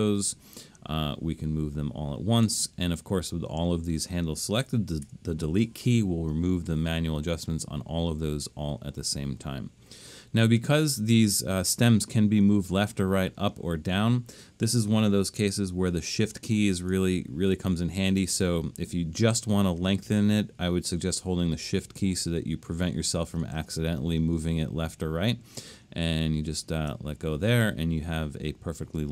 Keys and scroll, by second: 5.1 BackSpace, 15.5 BackSpace.